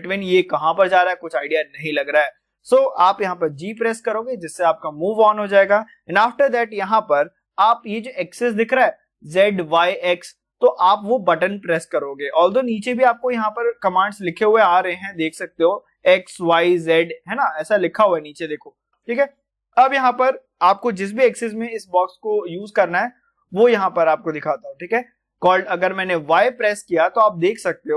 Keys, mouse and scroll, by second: 2.4-3.6 middle drag, 3.6 g, 25.6 typing, 27.5-27.9 typing.